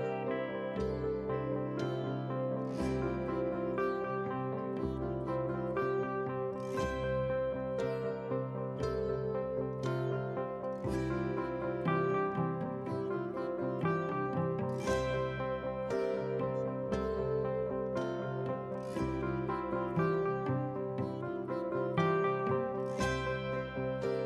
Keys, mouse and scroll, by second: 4.0-4.4 ctrl+scroll up 1, 4.6-5.1 ctrl+scroll up 2, 6.2-24.2 drag.